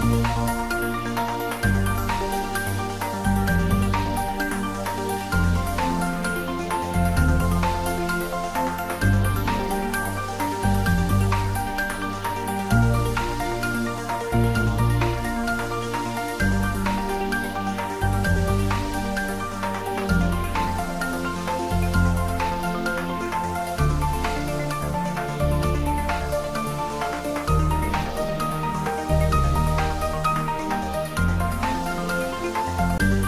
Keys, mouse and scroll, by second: 0.8 Down, 3.1 Up, 3.6 click, 4.0-4.9 scroll up 1, 5.7 s, 9.1 click, 9.6 middle click, 10.8 scroll down 1, 12.1 click, 12.6-13.6 scroll down 1, 13.6 click, 14.3 scroll down 1, 14.7 middle click, 15.8-16.7 scroll down 1, 17.0 middle click, 17.7 shift+z, 18.1-20.7 middle drag, 20.7 click, 22.5 3, 23.0-24.2 scroll down 2, 24.2-25.3 scroll down 1, 25.3 g, 25.8 z, 27.1 click, 27.3-29.7 typing, 28.7 click, 30.5 click, 30.8-31.8 typing, 32.8 click.